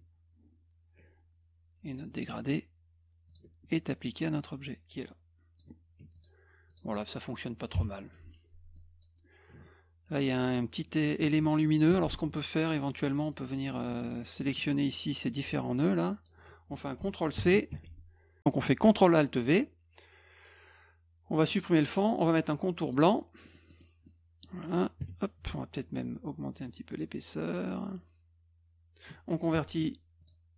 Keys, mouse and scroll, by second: 1.9 click, 3.3 shift+click, 3.7-5.6 drag, 6.0 F1, 6.2 click, 6.7 click, 8.8 drag, 11.2 ctrl+z, 11.6 middle click, 11.9 F2, 13.3 drag, 14.2 shift+click, 14.9 shift+click, 15.7 shift+click, 17.4 shift+c, 17.7 F1, 21.5 click, 22.8 middle click, 23.5 middle click, 23.7 middle click, 24.1 middle click, 26.8 middle click, 26.8-27.5 scroll up 2, 28.7 scroll up 1, 30.2 click.